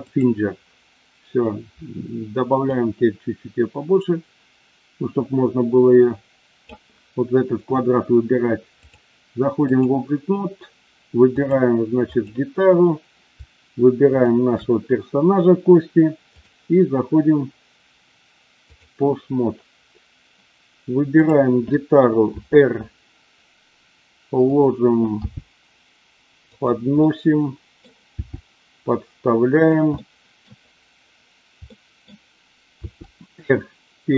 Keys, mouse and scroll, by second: 0.1 click, 2.7-6.7 drag, 8.9-9.8 drag, 14.2 shift+click, 16.3-18.8 drag, 21.2 click, 22.3 r, 24.4 click, 25.2 g, 26.4 drag, 26.9 scroll up 1, 27.1-27.8 middle drag, 28.1 g, 29.6 click, 29.9-30.4 middle drag, 30.4 scroll down 1, 31.6 scroll up 1, 31.7 middle click, 32.8 r.